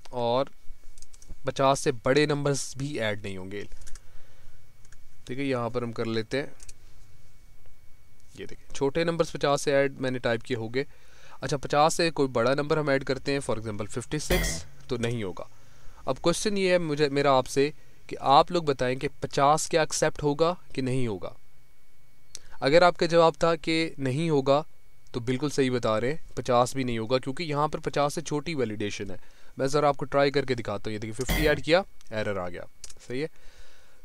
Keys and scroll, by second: 9.0 Down, 9.6 Up, 27.9 Escape, 33.8 Escape.